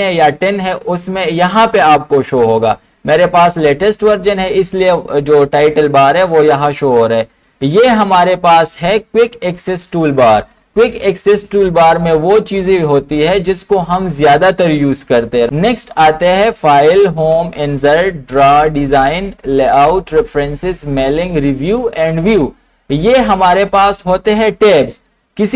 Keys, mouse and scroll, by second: 25.4 click.